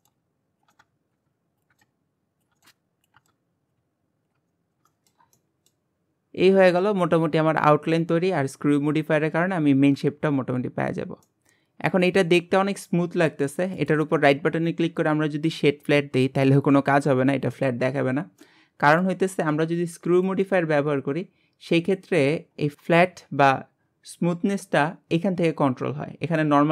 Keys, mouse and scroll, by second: 0.0-3.3 typing, 0.0 shift+middle click, 0.7 scroll down 2, 0.7 shift+middle click, 1.2 shift+middle click, 1.7 scroll down 1, 1.8 shift+middle click, 2.5 scroll up 2, 2.6 shift+middle click, 3.2 scroll up 1, 3.2 shift+middle click, 4.3-4.9 scroll down 7, 4.5 middle drag, 4.9-6.3 shift+middle drag, 6.3-6.6 scroll up 2, 6.6-8.2 shift+middle drag, 8.2-9.0 scroll up 2, 9.0 scroll up 1, 9.2-9.9 scroll down 1, 9.9-11.0 scroll up 2, 11.0 scroll down 2, 11.3-13.8 middle drag, 13.8-16.8 right drag, 16.9-20.2 middle drag, 20.2-22.7 drag, 22.7 scroll down 1.